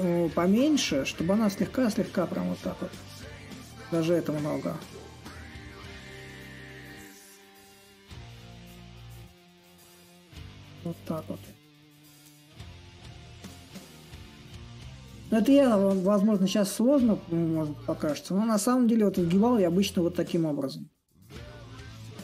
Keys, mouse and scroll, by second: 5.2-10.3 ctrl+drag, 10.3-13.0 ctrl+drag, 17.2-22.2 drag.